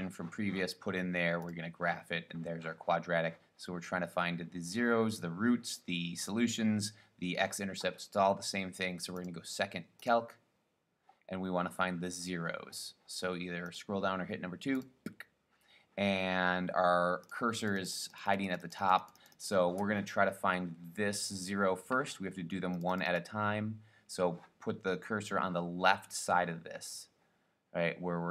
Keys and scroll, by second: 13.9 Down, 15.0 Return, 17.4 Left, 17.7 Left, 18.0 Left, 18.2 Left, 18.3 Left, 18.7 Left, 18.9 Left, 19.0 Left, 19.3 Left, 19.5 Left, 22.9 Left, 23.1 Left, 23.3 Left.